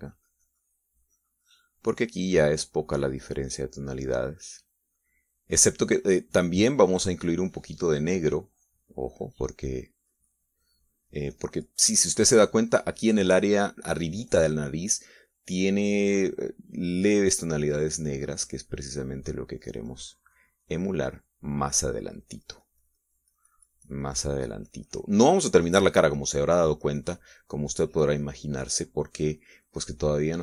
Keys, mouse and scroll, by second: 1.4-5.0 drag, 8.9-11.1 drag, 15.8-18.3 drag.